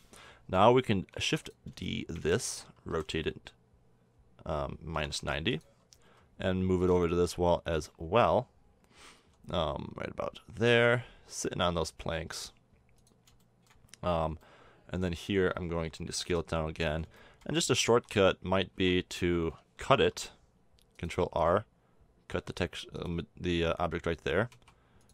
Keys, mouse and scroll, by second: 1.1 shift+d, 2.9 r, 6.0 g, 9.2 g, 13.4-14.8 middle drag, 16.3 KP_7, 17.9 Tab, 18.7 a, 19.9 ctrl+r, 24.5 a.